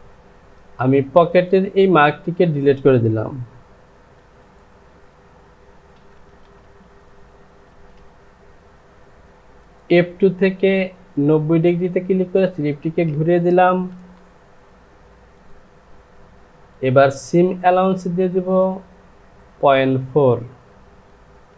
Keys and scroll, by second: 14.0 Home.